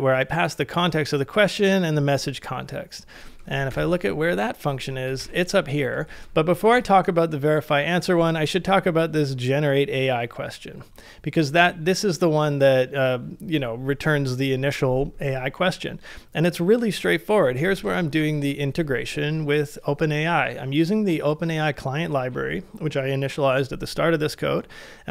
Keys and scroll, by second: 3.7 shift+8, 5.2 shift+v, 6.1 ctrl+c, 17.5-18.6 typing.